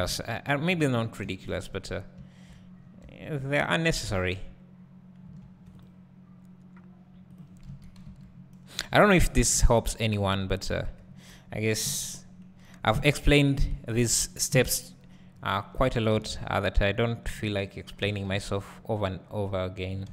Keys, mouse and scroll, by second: 0.6-1.2 scroll down 2, 1.2 `, 2.8 scroll down 2, 3.0 `, 5.4 ctrl+r, 7.4 click, 7.7 KP_3, 10.3 KP_Decimal, 10.8 KP_0, 11.8 KP_1, 12.9 KP_3, 13.5 KP_Decimal, 14.5 KP_1, 15.7 1, 16.8 z, 16.9 click, 18.0 ctrl+b.